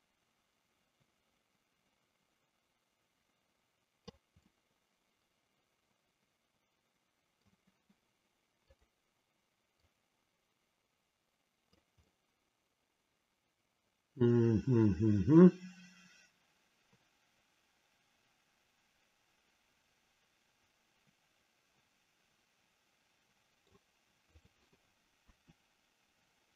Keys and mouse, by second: 4.5-7.5 middle drag, 8.8 click, 9.9-11.9 drag, 12.1-23.7 middle drag, 24.3 click, 25.3 KP_3.